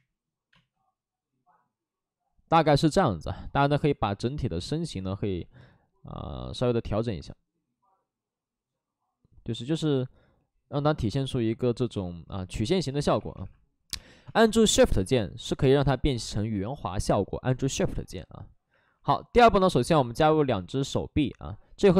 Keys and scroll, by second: 4.0 w, 5.6 ctrl+z, 10.8 ctrl+z, 11.9 ctrl+z, 11.9 2, 13.1 2, 14.2 space, 21.3 w.